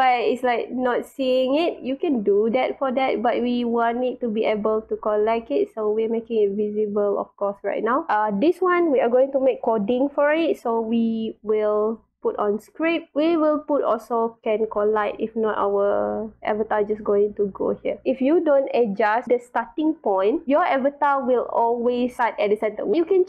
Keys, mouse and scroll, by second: 2.9-5.8 drag, 6.8 click, 7.4 click, 11.7 click, 14.5 click, 15.8-17.5 drag, 17.9 scroll down 1, 20.0 scroll down 2, 21.2-21.9 drag, 22.9-23.2 drag.